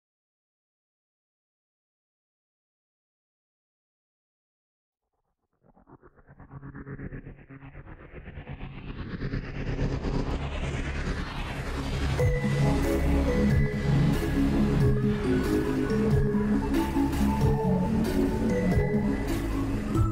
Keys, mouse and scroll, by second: 0.5 click, 1.1 ctrl+z, 2.1 ctrl+z, 2.4 click, 2.8 click, 3.0 click, 4.8 ctrl+z, 5.0 click, 5.3 ctrl+z, 5.8 click, 6.0 shift+`, 8.1 click, 8.9 shift+`, 9.6 click, 10.0 click, 10.4 click, 10.9 click, 12.1 click, 13.0 click, 13.4 click, 14.0 click, 14.5 click, 15.1 click, 15.6 click, 16.8 click, 17.5 click, 18.6 click, 19.3 ctrl+z, 19.3 click, 19.5 click.